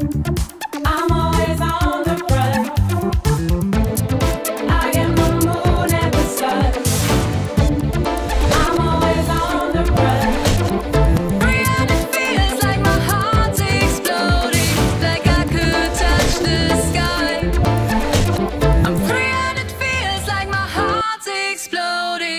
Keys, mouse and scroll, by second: 13.9 click, 14.2 click, 16.7 click, 16.8 click, 18.2 click, 19.3 click, 19.5 click, 22.0 click.